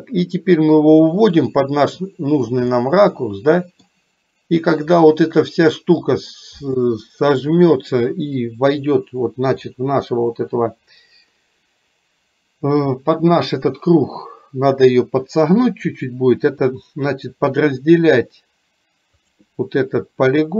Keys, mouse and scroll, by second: 1.0-2.6 drag, 2.9-4.0 middle drag, 19.4 click.